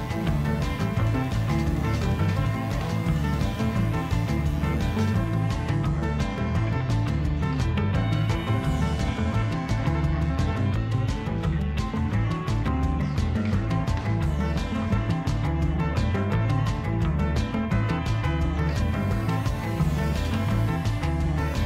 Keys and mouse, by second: 7.0 shift+a, 14.7-19.3 ctrl+middle drag, 19.3 right click, 21.5 x.